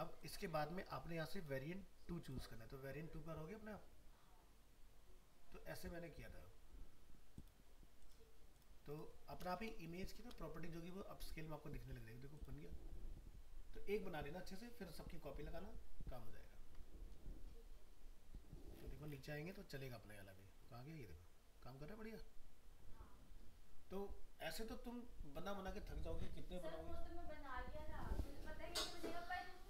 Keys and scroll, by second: 10.2 ctrl+Return.